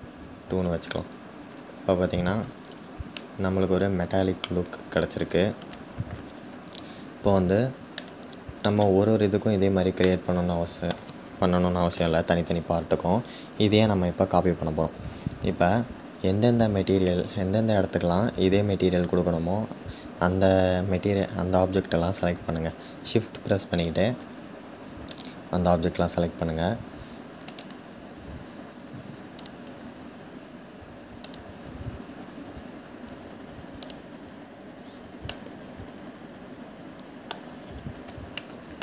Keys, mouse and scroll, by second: 1.7-2.8 scroll up 6, 2.8-4.8 middle drag, 4.8-5.8 scroll down 3, 5.8-6.9 scroll down 2, 6.9-7.7 scroll down 2, 7.7-23.6 shift+middle drag, 23.6 shift+click, 31.8-32.6 scroll up 6, 35.0-37.0 middle drag, 37.0-38.1 scroll down 5, 38.1 shift+middle click, 38.6-38.8 scroll down 2.